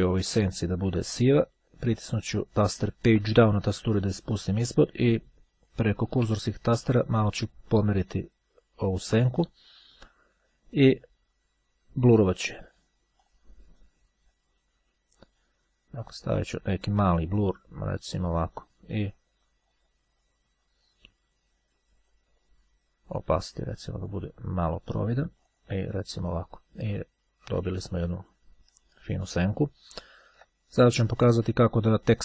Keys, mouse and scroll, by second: 0.3 click, 3.3 Page_Down, 4.6 Down, 7.6 Right, 13.2 click, 16.2 click, 17.1 click, 23.3-24.7 drag, 27.8 click, 31.3 click.